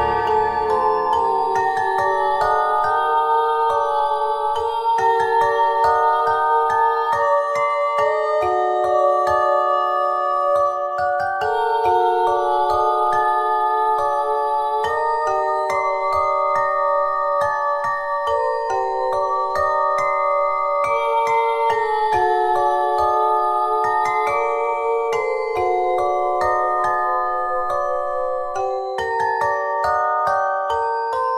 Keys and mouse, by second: 0.9 z, 2.4 e, 3.3 click, 5.0 r, 6.4 e, 9.1 click, 10.0 s, 11.4 e, 13.2-15.7 drag, 15.7 e, 17.0 click, 17.9 e, 19.4 e, 20.7 click, 20.9 s, 22.1-23.2 drag, 22.8 e, 23.4 s, 25.6 r, 26.3-28.1 drag, 28.4 e, 29.2 click, 29.5 r.